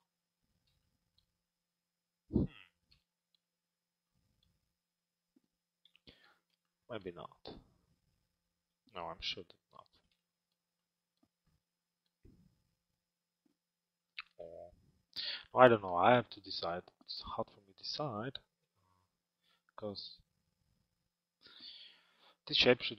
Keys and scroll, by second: 17.9 z.